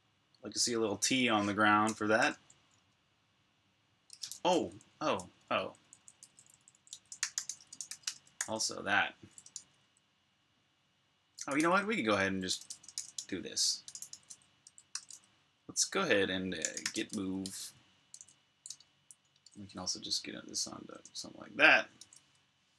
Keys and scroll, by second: 2.0 super+q, 2.6 super+Tab, 4.0 shift+super+Tab, 4.8-14.9 typing, 16.2-18.0 typing, 18.5 super+Tab, 21.9 super+Tab, 22.2 super+Tab.